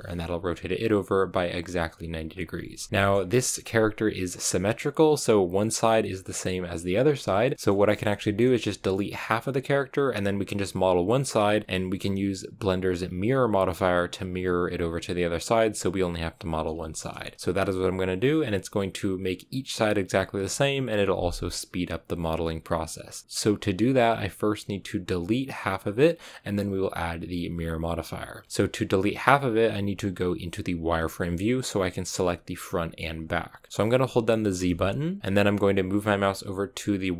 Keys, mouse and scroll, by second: 2.7 shift+middle click, 3.4-7.5 scroll up 1, 7.5 shift+middle click, 7.7-8.1 scroll up 1, 8.1-11.9 shift+middle drag, 11.9-16.7 scroll down 1, 16.7-37.1 shift+middle drag.